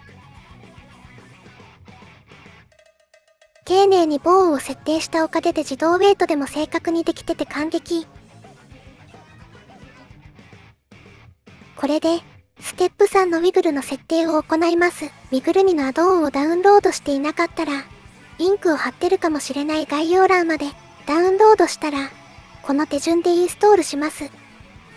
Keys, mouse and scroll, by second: 0.9 middle click, 1.2 click, 1.8 middle click, 2.6 click, 2.8 click, 3.2 middle click, 3.7 middle click, 4.4 middle click, 4.7 middle click, 7.9 middle click, 8.9 shift+click, 10.4 shift+click, 10.7 click, 13.5 middle click, 14.1 shift+middle click, 14.4 middle click, 15.0 middle click, 17.0 click.